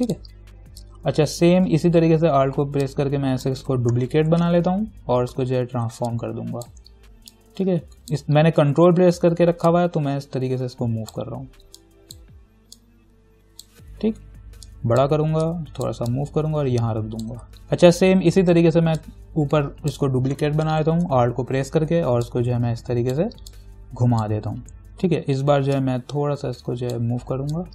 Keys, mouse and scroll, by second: 3.1-4.6 alt+drag, 4.6 ctrl+t, 6.3-14.9 ctrl+alt+drag, 14.9-17.6 alt+drag, 19.2-20.9 alt+drag, 20.9 ctrl+t, 22.5-26.0 alt+drag, 26.0-27.7 ctrl+drag.